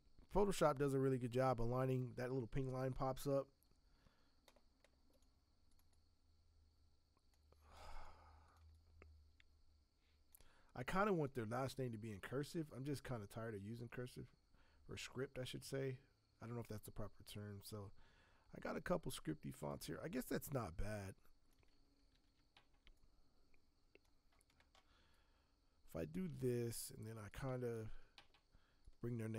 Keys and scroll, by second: 22.1 ctrl+t, 27.8 ctrl+t.